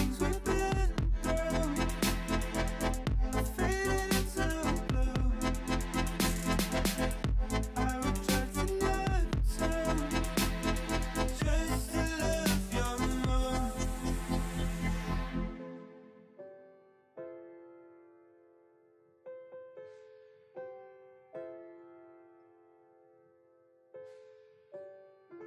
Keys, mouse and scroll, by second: 0.1 middle click, 0.6 alt+shift+click, 1.2 alt+shift+click, 1.6 alt+shift+click, 1.9 middle click, 2.8 scroll up 1, 3.1 shift+middle click, 3.5 alt+s, 5.9 ,, 6.8 ., 7.4 s, 10.5 alt+z, 10.9 KP_3, 11.3 shift+middle click, 11.6-12.9 scroll up 2, 12.9 shift+middle click, 13.5-14.1 scroll up 4, 14.1 shift+middle click, 14.3 scroll down 4, 14.6 shift+middle click, 14.8-15.5 scroll up 7, 15.5 c, 17.5 middle click, 17.8 alt+z, 18.1 shift+middle click, 18.4-18.9 scroll down 2, 18.9-21.1 shift+middle drag, 21.1 g, 23.2 scroll down 4, 23.3 middle click, 23.8 scroll down 1, 23.9-24.3 shift+middle drag, 24.3 click, 24.5 Tab, 24.6 click, 24.8-25.4 middle drag.